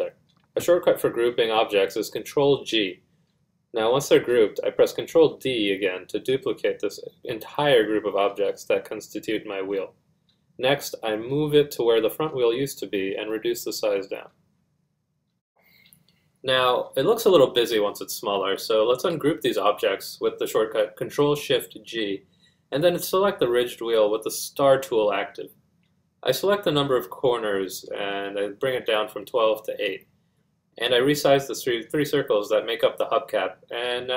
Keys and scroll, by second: 10.9 z, 23.1 F1.